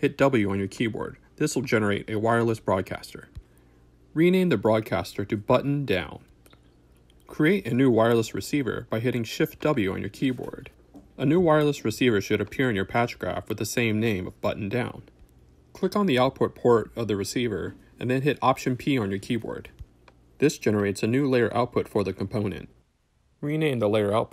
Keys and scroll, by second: 2.1 shift+Return, 3.1-7.8 typing, 8.0 Return, 10.3 shift+w, 18.7 alt+p, 21.4 shift+Return, 23.0-24.3 typing.